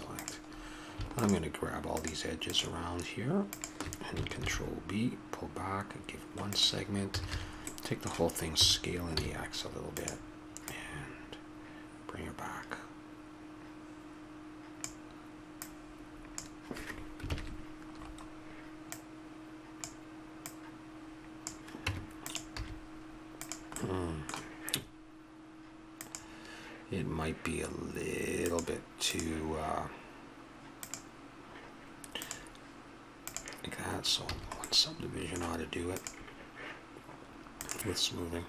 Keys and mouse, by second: 4.4 ctrl+b, 7.1 a, 7.3 a, 8.6 s, 10.7-12.5 drag, 15.6-17.3 drag, 18.9-20.7 drag, 21.9 Tab, 22.6 a, 26.0-27.9 drag, 28.4-30.3 drag, 30.8-34.3 drag, 34.3 a, 35.9-37.6 right drag.